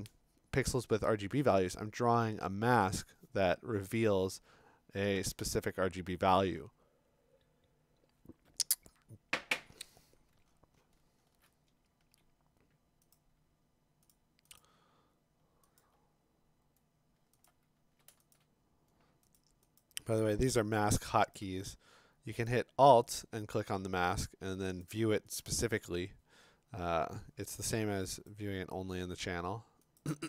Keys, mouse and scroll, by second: 10.2-11.4 scroll, 13.1 click, 14.1 click, 14.6 click, 15.8 alt+click, 17.5 alt+click, 18.3 shift+click, 19.4 click, 19.8 click, 21.3 shift+click, 22.5 click, 23.2 click, 23.7 click, 24.8 click, 25.4 click, 28.3 middle click, 30.0 middle click.